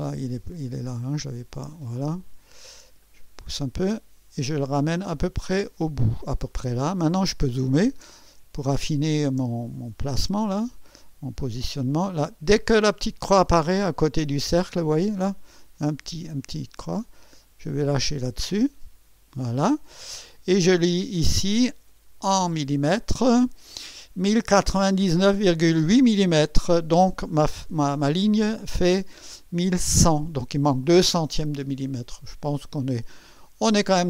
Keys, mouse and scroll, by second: 1.0 click, 2.2-2.7 ctrl+scroll down 2, 3.1 ctrl+middle click, 3.5 scroll up 1, 4.9-6.7 drag, 7.0-7.8 ctrl+scroll up 4, 8.1 ctrl+middle click, 8.9 ctrl+scroll up 2, 9.5 ctrl+middle click, 10.0-10.8 scroll up 4, 15.6-19.5 drag, 21.9 click, 22.8 click.